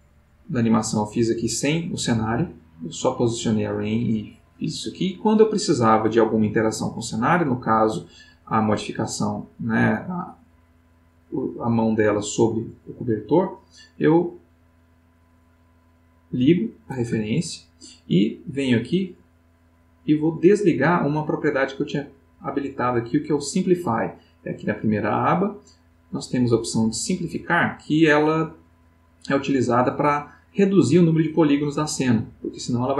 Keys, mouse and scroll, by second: 15.3 click, 17.2 ctrl+middle click, 19.1 click, 20.3 middle click, 26.1 click, 32.3-32.9 middle drag.